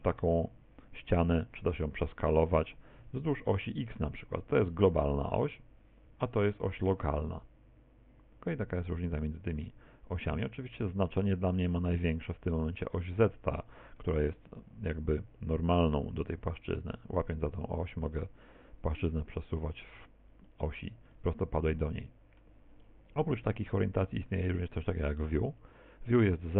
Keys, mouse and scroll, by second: 3.0 s, 9.2 middle click, 11.4 middle click, 13.0 middle click, 16.6 click, 19.8-20.5 Escape, 20.5 middle click, 21.2 middle click, 24.0 click.